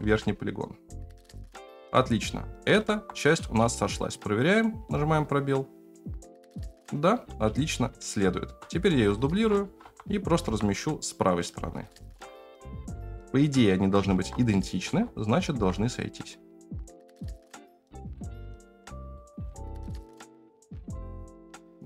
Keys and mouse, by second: 0.0 g, 1.8 Tab, 2.8 alt+z, 3.4 space, 4.0 click, 7.4 space, 8.0-8.4 shift+middle drag, 9.4 shift+d, 11.8 shift+middle click, 12.9 shift+middle drag, 14.1 alt+z, 14.8 g, 18.6 alt+z, 19.1 click, 19.3 space.